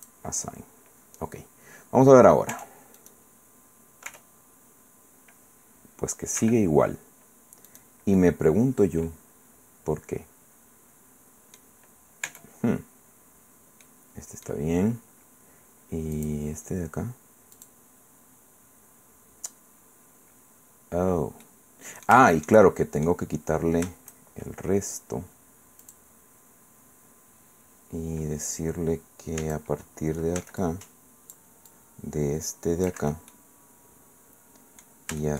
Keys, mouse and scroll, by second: 1.3-1.7 scroll down 1, 2.5 Tab, 3.0 right click, 4.1 r, 6.4 Escape, 7.7 click, 8.2-11.8 drag, 12.2 Tab, 13.8 middle click, 13.9-14.5 scroll down 1, 16.1 click, 17.5 click, 21.4-23.5 middle drag, 25.8 click, 29.4 a, 30.4 c, 30.6 click, 31.7-33.1 drag, 33.0 Escape, 33.3-35.0 drag, 35.2-35.3 shift+drag.